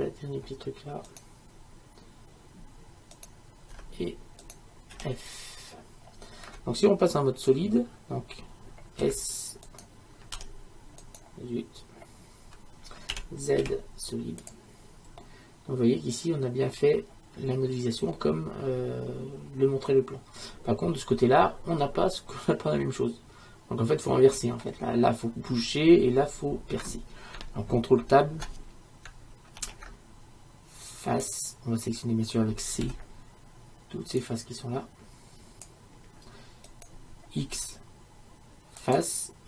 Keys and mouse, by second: 3.2-4.9 right drag, 3.8 shift+f, 5.0 f, 9.0 s, 10.4 s, 13.2 z, 13.7 z, 15.2-17.1 middle drag, 19.2-21.3 middle drag, 29.6 ctrl+Tab, 37.5 x.